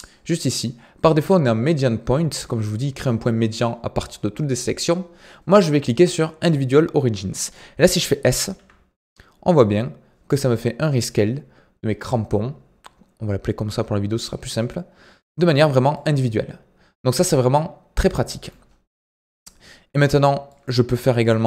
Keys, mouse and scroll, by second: 8.5 s, 14.5-21.4 middle drag.